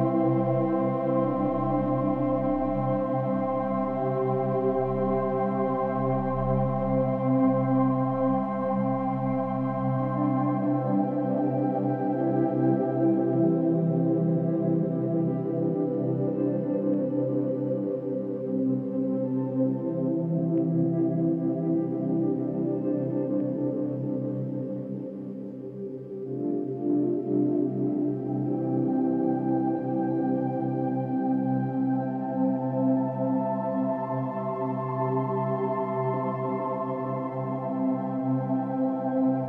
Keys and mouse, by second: 0.3 click, 1.5-1.8 typing, 2.0 Return, 3.2-4.9 drag, 4.4 ctrl+z, 5.1-9.7 alt+drag, 8.1 typing, 10.2-11.7 drag, 11.9-12.8 drag, 14.7 BackSpace, 14.9 BackSpace, 15.8-20.4 drag, 22.2-25.0 alt+drag, 22.2-25.0 alt+middle drag, 25.3-26.1 drag, 26.4-27.6 drag, 28.2-29.7 drag, 30.3 Down, 31.1 Down, 31.8 Down, 33.0 Up, 33.4 Up, 33.6 Up, 33.9 Up, 34.4 Up, 34.7 Up, 35.7 Up, 36.2 Up, 36.4 Up, 36.8 Down.